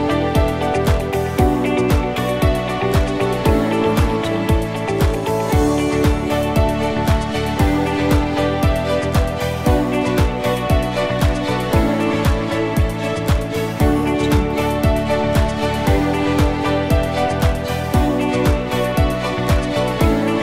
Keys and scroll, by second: 1.5 x, 18.6 a.